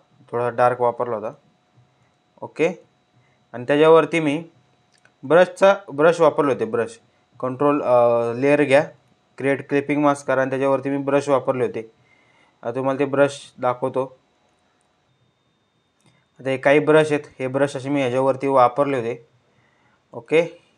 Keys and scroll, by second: 18.3 ctrl+z.